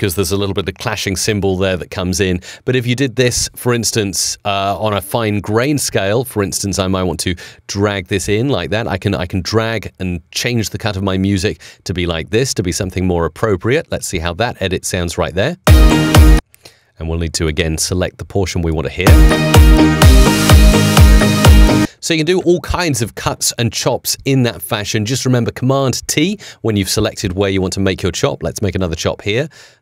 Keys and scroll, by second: 15.5 space, 18.9 space, 21.6 space.